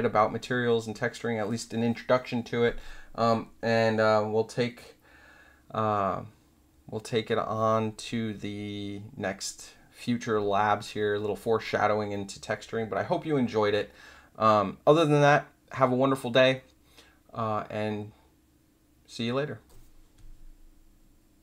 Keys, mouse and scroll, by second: 21.3 click.